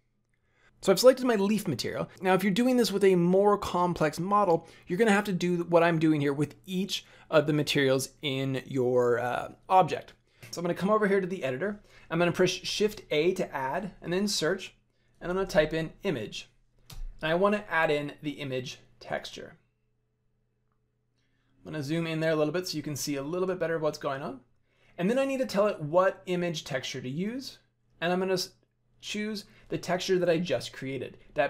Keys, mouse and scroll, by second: 10.4 click, 10.4 right click, 12.6 shift+a, 21.4-23.4 scroll up 6, 23.4 middle click, 27.2 click.